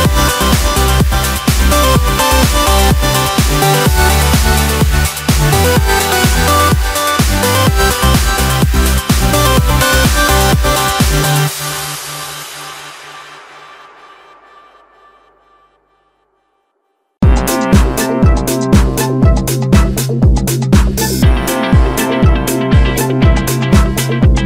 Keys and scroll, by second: 6.9 Escape.